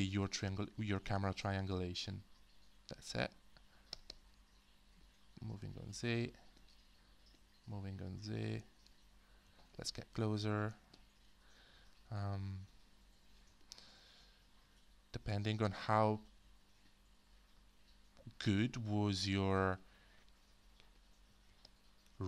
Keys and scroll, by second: 9.5 f.